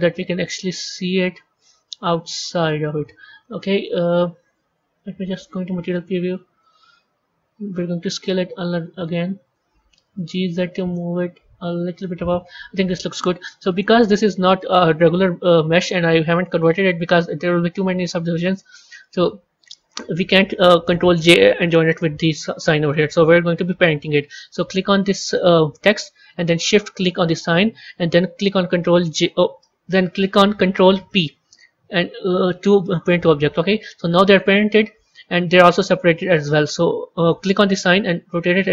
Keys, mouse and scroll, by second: 2.9-4.2 middle drag, 4.2 z, 6.1 KP_1, 6.5 KP_3, 7.8 s, 9.9 g, 12.3 a, 12.9-13.9 middle drag, 13.9 scroll up 2, 14.4-17.4 middle drag, 17.4 click, 18.9 a, 24.5 click, 27.0 shift+click, 28.9 ctrl+j, 31.0 ctrl+p, 34.2 click, 37.9 r.